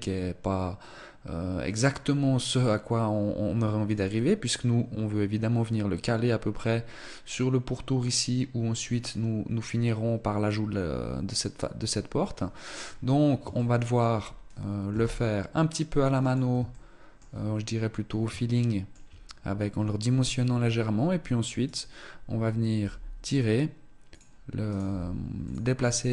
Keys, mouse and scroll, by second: 12.6-13.4 scroll up 2, 13.4 shift+middle click, 14.8 s, 16.6 shift+middle click, 17.2-17.9 scroll down 1, 17.9 shift+middle click, 17.9-19.6 scroll down 1, 21.5 right click, 22.6 g, 24.5 right click, 24.7 g, 25.8-26.1 scroll up 1.